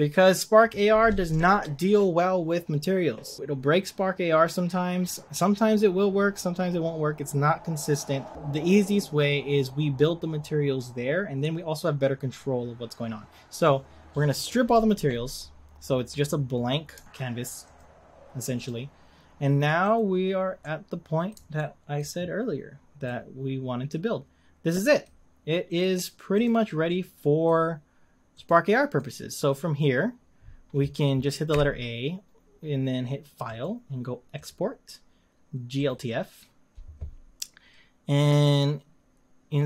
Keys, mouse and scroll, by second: 0.0-16.2 middle drag, 16.2-16.7 scroll up 3, 17.0-17.8 scroll down 1, 17.8 click, 18.7 click, 19.8 click, 20.6-22.5 middle drag, 22.5-23.0 scroll down 2, 23.0-25.8 middle drag, 25.8 click, 26.5 click, 26.8-28.5 middle drag, 28.5 click, 29.0-31.5 middle drag, 31.5 a, 35.9-38.2 drag.